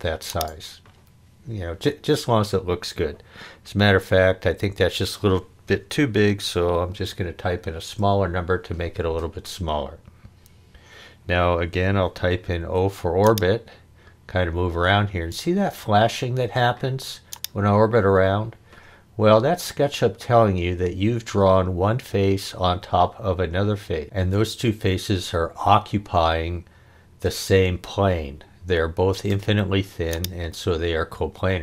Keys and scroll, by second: 5.9-7.3 typing, 7.8 Return, 12.6 o.